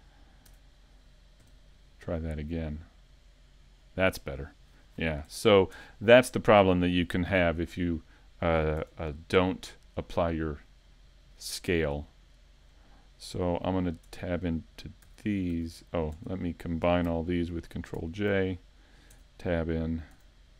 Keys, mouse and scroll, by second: 0.5 Tab, 5.3 Tab, 5.8 Tab, 8.8 Tab.